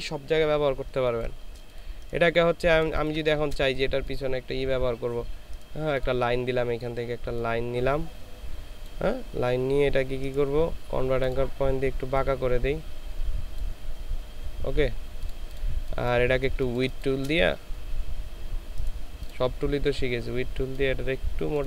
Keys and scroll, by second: 0.9 ctrl+space, 2.9 ctrl+space, 16.6 ctrl+space.